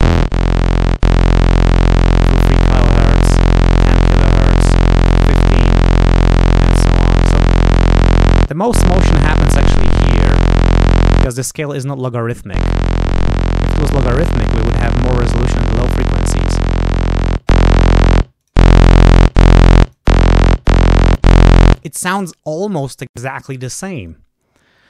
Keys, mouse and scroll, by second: 2.2-3.6 drag, 3.9-5.5 drag, 5.5-8.5 drag, 8.9-11.2 drag, 12.8-13.9 drag, 14.6-15.8 drag, 16.4 click, 18.3 click, 19.8 click, 21.0 click.